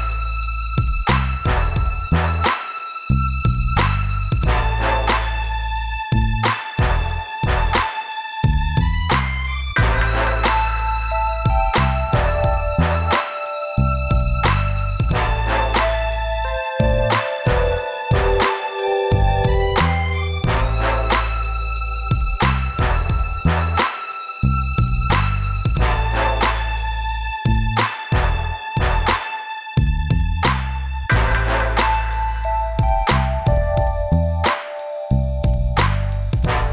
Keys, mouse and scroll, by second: 0.4 click, 0.5 click, 1.5 click, 2.8 click, 3.0 click, 3.2 Return, 3.8 click, 5.7 click, 5.8 click, 7.5 click, 9.7 click, 10.3 click, 11.1 click, 12.0 click, 12.6 click, 13.4 click, 13.4 click, 14.1 scroll up 1, 15.3 scroll down 1, 16.2 p, 21.4 scroll up 2, 21.7 scroll down 1, 21.8 scroll up 1, 22.8 scroll down 1, 22.8 click, 24.8 scroll down 2, 25.8 scroll up 2, 28.5 click, 29.8 click, 33.6 scroll down 2, 35.0 t.